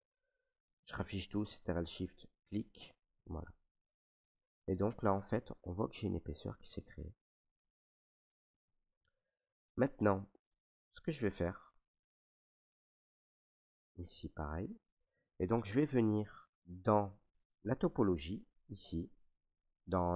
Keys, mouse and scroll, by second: 0.3 ctrl+right click, 1.9 click, 3.6 right click, 4.4 ctrl+right click, 7.6 right click, 8.2 ctrl+right click, 9.6 right click, 10.2 alt+right click, 10.8 ctrl+right click, 12.2 right click, 13.5 right click, 14.8 right click, 14.9 ctrl+right click, 15.4 ctrl+right click.